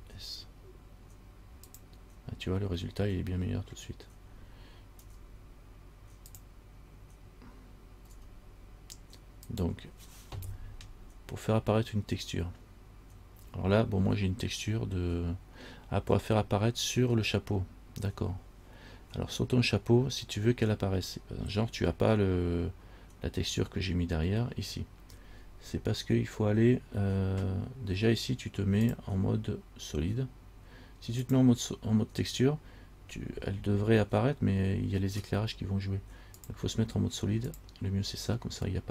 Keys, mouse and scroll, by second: 0.0 s, 5.2 g, 8.4 s, 29.0 click, 36.6 click.